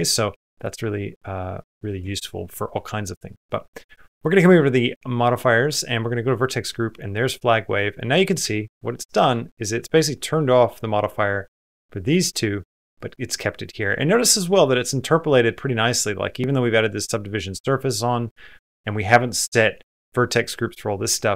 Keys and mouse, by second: 1.5 middle click, 1.8 Tab, 3.2 click, 4.0 click, 6.2 click, 7.5 middle click, 8.6 shift+middle click, 8.6 space, 9.2 shift+middle click, 10.3 middle click, 13.7 middle click, 16.9 click, 18.1 middle click, 18.7 middle click.